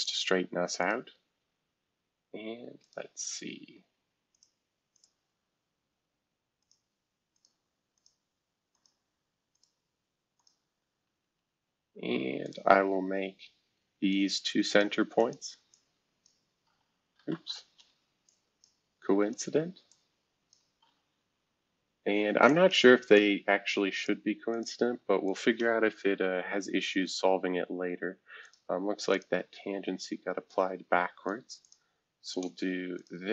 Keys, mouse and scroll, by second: 0.0 right click, 1.8 scroll up 3, 2.8 click, 4.3 click, 4.9 click, 6.6 click, 7.3 click, 7.9 click, 8.7 click, 9.5 click, 10.4 click, 11.2 Escape, 12.4 click, 14.1 click, 15.2 click, 15.7 click, 17.3 ctrl+z, 17.7 Escape, 18.2 click, 19.3 click, 19.9 click, 20.8 c, 22.4 click, 23.1 click, 24.5 click, 25.2 shift+click, 26.9 t, 28.1-28.9 typing, 30.5 ctrl+click, 31.6 ctrl+click, 32.2 ctrl+shift+click.